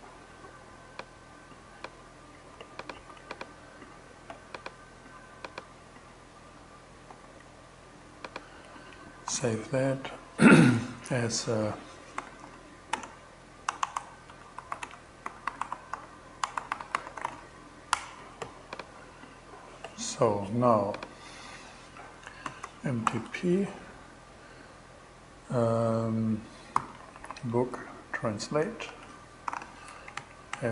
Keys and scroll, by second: 2.4 super+c, 6.5 super+v, 8.7 super+s, 11.4-17.2 typing, 17.4 Return, 21.7-23.0 typing, 26.0-27.7 typing, 28.3 Return, 28.9 alt+5, 29.0 alt+6, 29.4 alt+Left, 30.5 alt+Return.